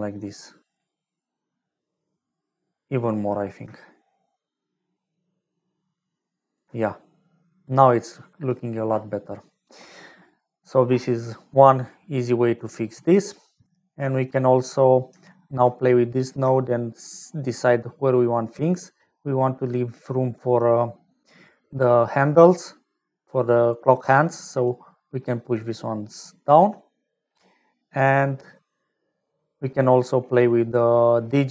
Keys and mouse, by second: 3.8-5.2 shift+middle drag, 7.8 middle click, 8.5 middle click, 13.2-14.3 middle drag, 16.0 middle click, 18.5-22.9 shift+middle drag, 24.7-25.7 shift+middle drag, 26.5 shift+middle click, 26.9 middle click, 27.5-29.1 middle drag, 30.4 middle click, 31.3 middle click.